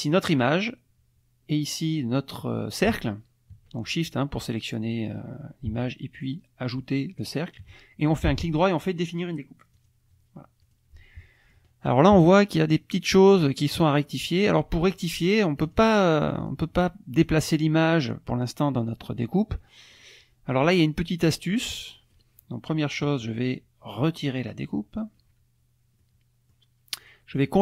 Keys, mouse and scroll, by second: 0.0 click, 3.0 shift+click, 4.4 click, 4.8 click, 7.2 shift+click, 8.2 right click, 9.7 click, 10.6 click, 11.2 click, 15.6 click, 16.1 click, 17.1 click, 19.9 click, 21.2 click, 22.1 right click, 24.4 click, 26.0 click, 27.0 click, 27.4 click.